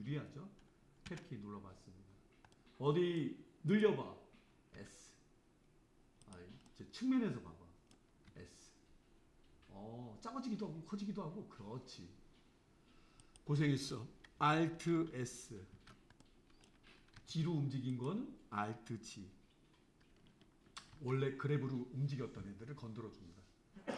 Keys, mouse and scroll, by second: 1.1 Tab, 1.9-2.6 scroll down 2, 2.6-3.7 middle drag, 3.7 click, 4.8 s, 6.7-8.3 middle drag, 8.3 s, 15.8 alt+s, 16.2-17.2 middle drag, 17.2 g, 21.0 alt+g.